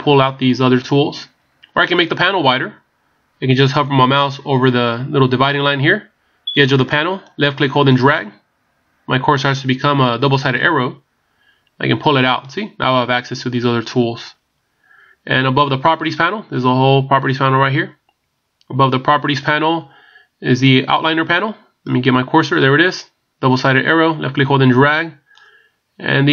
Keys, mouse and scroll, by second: 0.1 scroll down 8, 3.1 scroll up 13, 7.2 click, 20.6 click, 24.1 click.